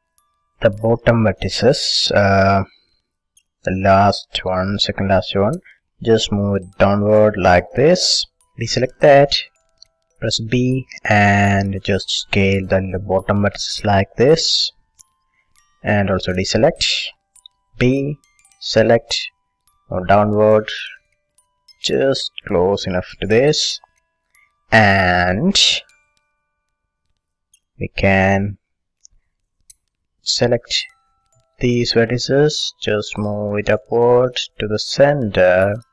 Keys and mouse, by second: 4.4-6.5 middle drag, 6.5-8.1 drag, 8.1 middle click, 8.7 a, 9.1-10.9 drag, 10.3 b, 12.4 s, 15.0-16.9 drag, 16.3 a, 16.9-19.5 middle drag, 17.8 b, 19.7-21.5 drag, 23.5 middle click, 25.4 middle click, 26.2 middle click, 27.5-30.0 middle drag, 30.0 a, 30.6-32.4 drag, 31.8 b, 33.6-35.5 drag, 35.5 middle click.